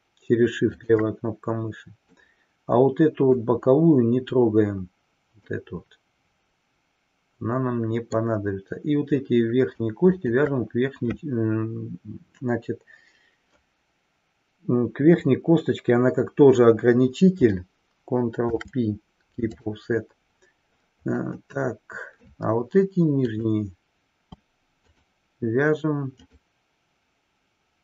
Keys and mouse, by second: 0.9 shift+click, 2.3-3.5 middle drag, 5.5-8.3 middle drag, 10.0 shift+click, 18.4 ctrl+p, 21.5-22.4 middle drag, 23.4-23.9 drag, 24.9-25.7 shift+drag, 26.3-27.0 shift+drag.